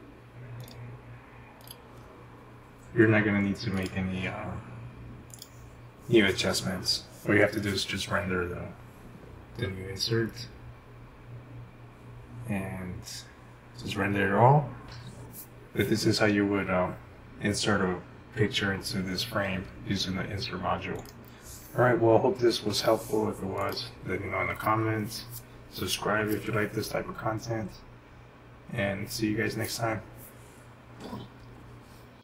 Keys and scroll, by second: 22.5 Home.